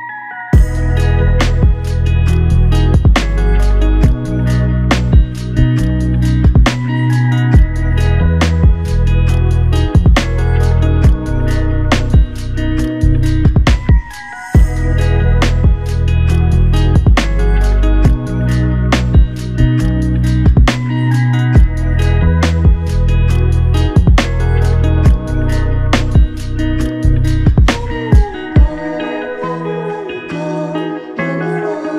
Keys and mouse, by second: 0.9 alt+click, 2.9 double click, 3.9 alt+click, 4.4 alt+click, 6.1 ctrl+click, 8.6 alt+click, 9.3 ctrl+click, 10.2 ctrl+i, 11.6 double click, 13.0 shift+click, 14.5 alt+click, 15.6 f, 16.7 alt+click, 22.9 shift+click, 24.6 alt+click, 27.2 ctrl+alt+click, 28.5 alt+click.